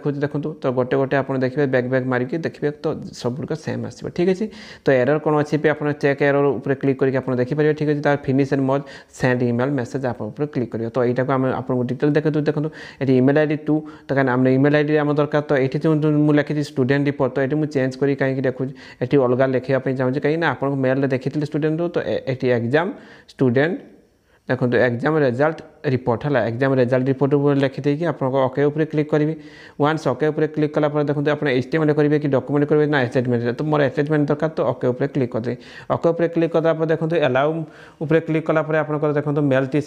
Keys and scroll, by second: 20.8 Page_Down, 23.7 Page_Down, 24.6 ctrl+0, 25.4-27.3 typing, 28.4 shift+a.